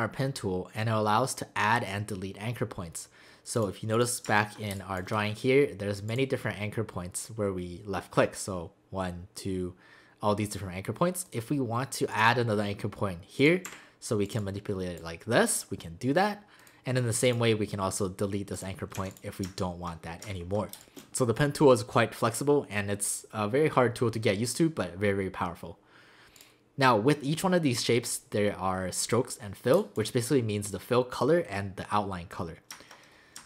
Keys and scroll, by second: 4.7 space, 13.7 a, 19.0 v, 20.7 space, 29.7 space.